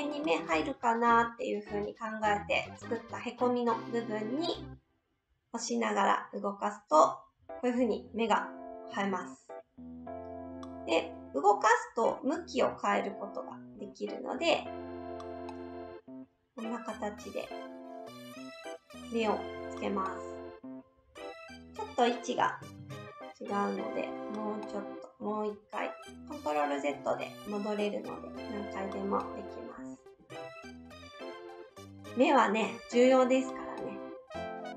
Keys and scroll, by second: 22.7 ctrl+z, 30.3 ctrl+z.